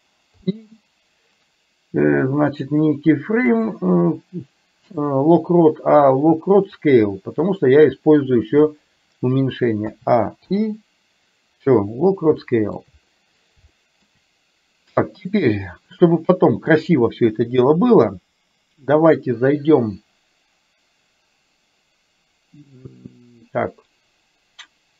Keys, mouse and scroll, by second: 0.4 i, 2.6-7.3 drag, 9.9 a, 10.6 i, 12.5 middle click, 13.8 shift+middle click.